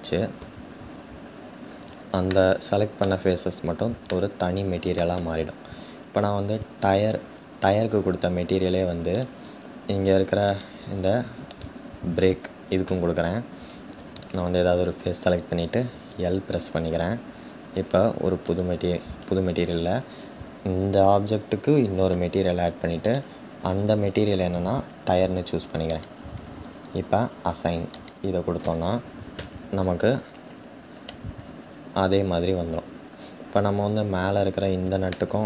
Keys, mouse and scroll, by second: 0.2 Tab, 0.9-1.5 scroll down 1, 1.5-2.0 scroll down 1, 2.0-8.8 shift+middle drag, 8.8 click, 9.5-10.2 scroll up 2, 10.2-11.2 scroll up 1, 11.2-12.9 scroll up 1, 12.9 Tab, 18.5-26.0 drag, 28.0-29.2 drag, 29.2 Tab, 29.5-30.5 scroll down 2, 31.0-31.5 scroll down 3, 33.1-34.8 scroll up 3, 34.8-35.4 shift+middle drag.